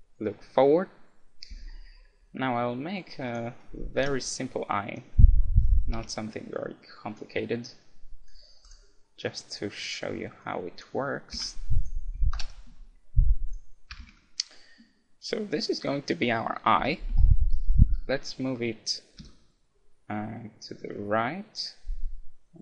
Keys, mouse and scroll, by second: 3.3-5.1 drag, 3.6-6.6 middle drag, 4.0 Tab, 5.6-11.2 drag, 6.0 Tab, 11.4 Tab, 11.8-13.5 right drag, 12.3 ctrl+KP_Add, 13.5-15.2 drag, 14.0 a, 14.2 Tab, 15.2-16.2 middle drag, 16.8 KP_1, 17.1 KP_Decimal, 17.7-20.7 middle drag, 19.2 g.